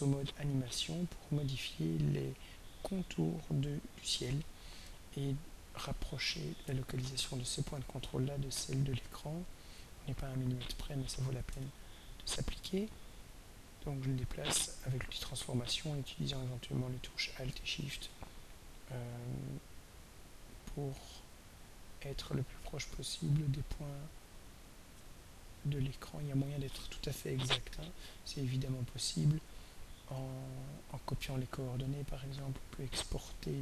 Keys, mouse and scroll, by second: 0.9 click, 2.4 click, 3.9 click, 7.2 ctrl+scroll up 2, 8.2 ctrl+scroll up 2, 9.4 scroll down 2, 11.6 ctrl+a, 13.4-24.9 drag, 28.7 click, 30.8 click, 32.5-33.6 shift+drag.